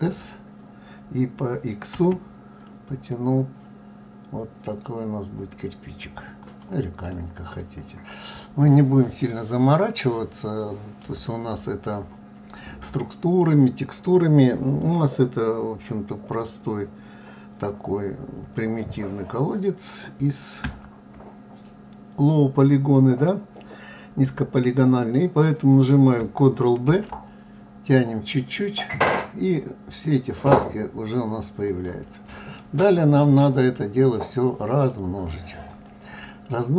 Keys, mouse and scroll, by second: 7.1-12.2 middle drag, 20.6 Tab, 26.8 ctrl+b, 32.6 scroll down 2, 34.7 click.